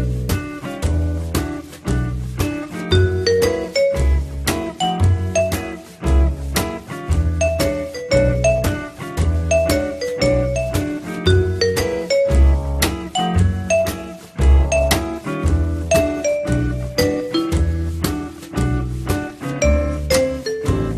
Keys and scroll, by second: 15.5 1.